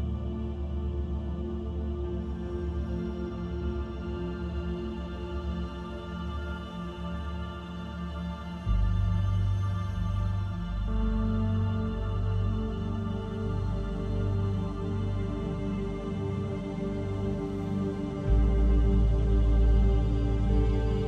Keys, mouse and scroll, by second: 0.3 click, 3.5 click, 4.9 KP_3, 5.8-6.4 scroll up 5, 6.4 shift+middle click, 6.9-7.7 scroll up 1, 7.7-8.0 scroll up 1, 8.7 scroll up 1, 9.4 e, 12.6 e, 15.0-15.6 scroll down 4, 15.4 middle click, 16.9-18.2 scroll down 2, 18.2 Tab, 18.5 scroll down 2, 20.3 ctrl+a.